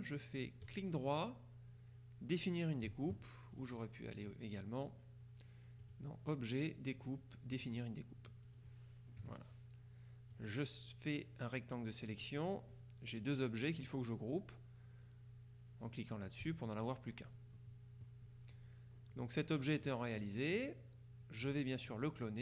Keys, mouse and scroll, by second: 0.7 right click, 3.6 click, 5.9 click, 7.6 click, 8.5 click, 9.3 KP_Subtract, 10.4-12.8 drag, 16.5 click, 17.6-18.6 middle drag, 18.6-19.2 scroll up 1, 19.2 click, 19.9 middle click, 20.7 click.